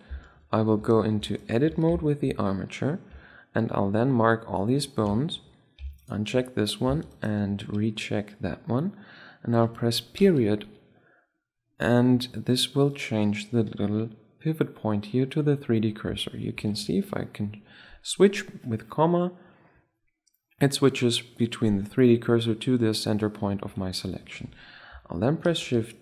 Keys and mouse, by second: 0.5 Tab, 0.9 Tab, 1.4 Tab, 2.8 a, 3.2 b, 3.5 click, 4.5-5.7 middle drag, 5.7 click, 6.0-8.4 right drag, 9.9 ., 12.6-13.4 drag, 14.3-16.0 middle drag, 16.8 ,, 23.6 ., 25.2 shift+d.